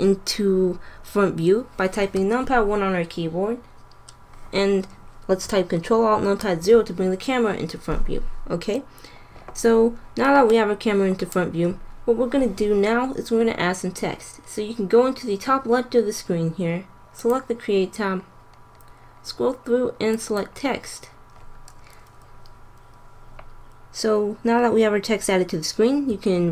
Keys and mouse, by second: 2.0 KP_1, 6.4 ctrl+alt+KP_0, 17.1-18.8 drag, 18.8-20.0 middle drag, 20.0-22.0 drag, 25.9 r.